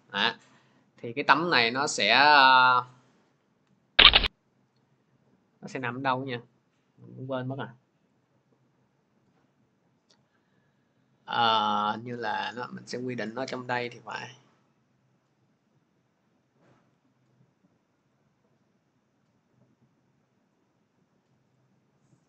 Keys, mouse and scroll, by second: 3.7 click, 16.7 click, 18.0 click.